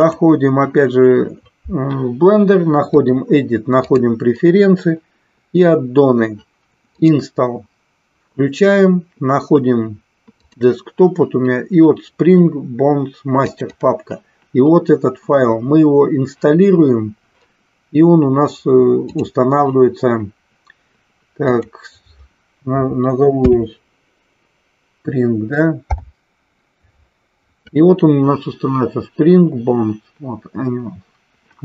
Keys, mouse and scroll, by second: 2.8-4.3 drag.